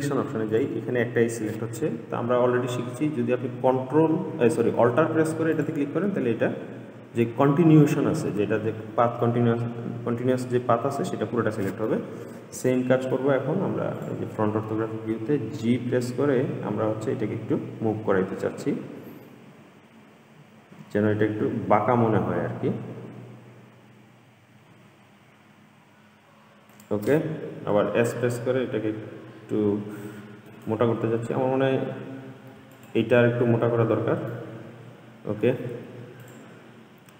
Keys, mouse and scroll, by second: 0.7 click, 5.7 alt+click, 9.4-14.1 middle drag, 14.1 click, 15.8 g, 27.9 s, 32.9 alt+click, 34.5-36.4 middle drag, 36.4 click.